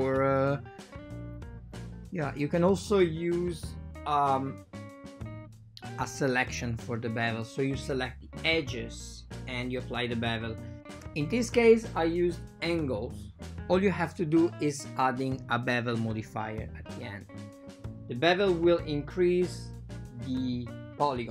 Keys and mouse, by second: 0.6 click, 2.5 right click, 2.7 right click, 9.6 click, 10.7 click, 11.4 click, 16.0-16.6 drag, 17.5-18.4 drag, 18.4 f, 18.6 f, 19.5 click.